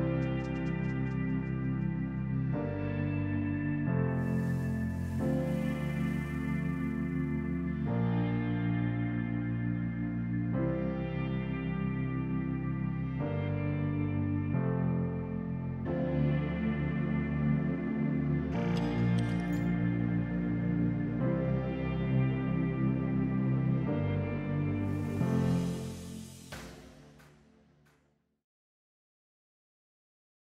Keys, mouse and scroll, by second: 0.5 KP_3, 0.8 KP_1, 1.5 r, 4.7 g, 6.6-8.3 middle drag, 8.3-9.0 drag, 9.7 r, 13.2-14.2 middle drag, 14.2 click, 14.6-16.1 shift+middle drag, 16.2 click, 17.7 click, 18.0-19.6 shift+middle drag, 21.4 scroll up 1, 21.4-22.9 middle drag, 23.5-25.0 middle drag, 26.1-27.6 middle drag.